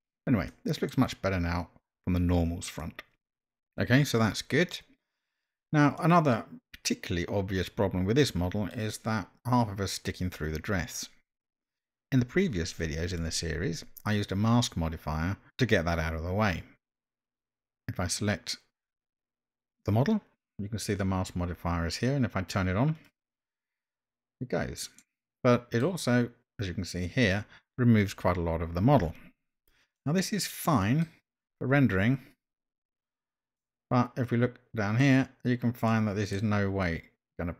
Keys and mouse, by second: 0.5-0.9 middle drag, 6.0-8.7 middle drag, 17.3 click, 23.1 click, 25.0-25.8 middle drag, 30.0-31.0 middle drag, 33.6-35.0 middle drag, 35.9 middle click, 36.8-37.5 middle drag.